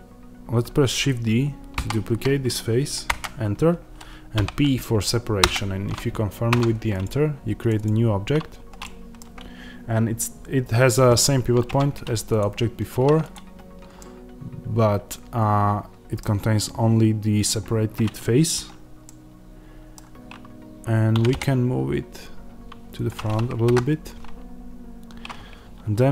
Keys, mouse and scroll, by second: 1.6 shift+d, 3.1 Return, 5.3 p, 5.4 Return, 6.4 Tab, 6.9 click, 8.7-12.3 middle drag, 11.5 Tab, 12.3 click, 13.9-22.9 middle drag, 21.0 g, 22.9 click, 23.6 KP_1, 24.8-26.1 scroll up 1.